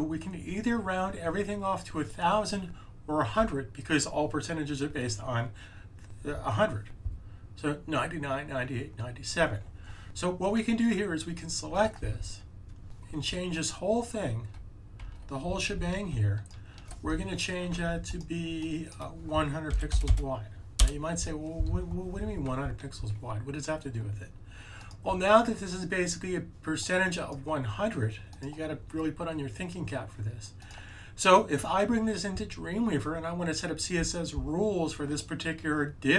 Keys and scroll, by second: 19.4-20.5 typing.